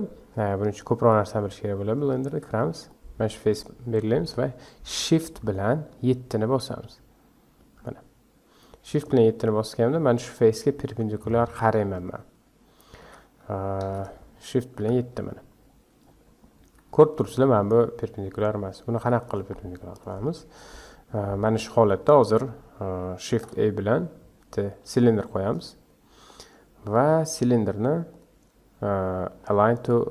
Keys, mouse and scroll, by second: 0.3-0.8 scroll up 1, 0.8 scroll down 3, 1.1-2.3 middle drag, 2.3 Tab, 2.8 click, 7.6 shift+KP_7, 9.4 scroll up 1, 13.0 KP_5, 13.9 shift+KP_1, 14.8 shift+KP_7, 15.6 scroll up 2, 16.1-16.6 scroll down 1, 16.6 Tab, 17.1 click, 18.9 x, 19.9 click, 21.2-23.3 scroll up 1, 23.3 shift+a, 26.2-26.9 scroll down 4, 26.9-28.1 scroll up 1, 28.1-30.1 drag.